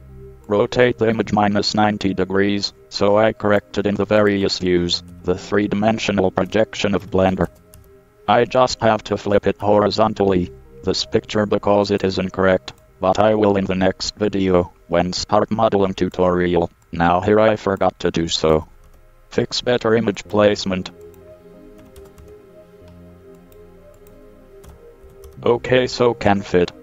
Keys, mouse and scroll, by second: 0.6-2.4 drag, 4.4-6.2 drag, 9.1-9.6 drag, 9.6-11.8 middle drag, 12.2-12.9 scroll up 1, 13.0-13.6 scroll up 1, 13.9-16.2 middle drag, 16.2-18.0 drag, 20.4-22.4 drag, 23.6-25.4 drag, 26.7 middle click.